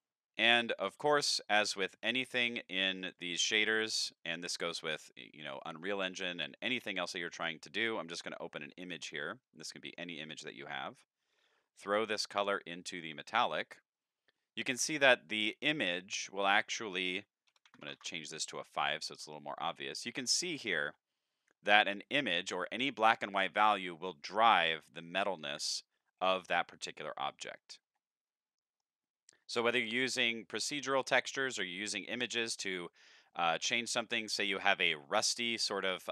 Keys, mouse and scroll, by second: 0.1 middle click, 1.1 shift+a, 3.1 click, 4.1 click, 4.6 click, 6.5 click, 8.9 click, 9.7 middle click, 10.3 click, 11.3-12.9 drag, 14.4-14.8 shift+middle drag, 16.4 click, 19.6 middle click, 20.1 middle click, 20.2 scroll up 1, 20.4-20.8 shift+middle drag, 21.6 scroll up 1, 21.9-22.3 middle drag, 26.9-27.3 middle drag, 27.3 scroll down 1, 27.5 middle click, 27.8 middle click, 28.0 scroll down 2, 28.3 middle click, 30.2-30.5 middle drag, 30.9-31.3 shift+middle drag, 31.6-32.1 middle drag, 32.3-32.6 shift+middle drag, 33.1 middle click, 34.1 scroll up 2, 34.3 shift+middle click, 35.8-36.1 middle drag.